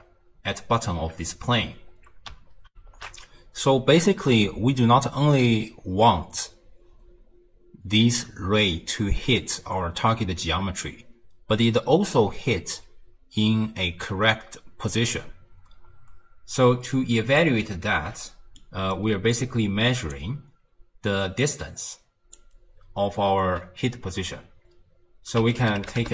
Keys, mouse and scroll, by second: 2.1 d, 16.6 click, 17.9 ctrl+x, 18.3 middle click, 18.9-19.4 scroll down 2, 19.4 click, 21.4 click.